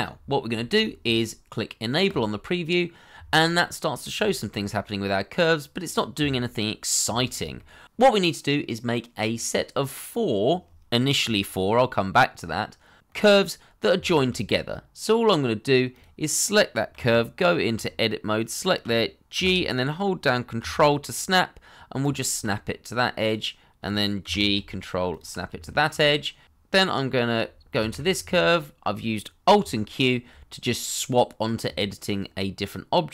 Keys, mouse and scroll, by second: 0.0 scroll down 1, 0.5 shift+middle click, 3.4 middle click, 4.2 shift+middle click, 4.8 middle click, 7.1 shift+middle click, 7.5 middle click, 8.3 shift+middle click, 8.9-10.9 scroll up 1, 14.0 shift+middle click, 16.9 Tab, 19.3 g, 22.3 ctrl+click, 24.2 g, 25.1 ctrl+click, 25.6 shift+middle click, 27.7 alt+q.